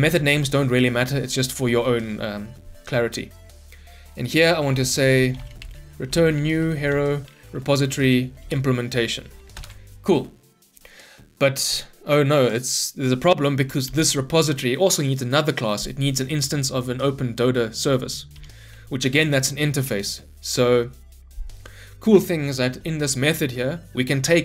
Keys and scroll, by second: 8.4 Return, 9.5 ctrl+shift+Return, 13.8 ctrl+p, 18.3 ctrl+p, 21.9 Escape.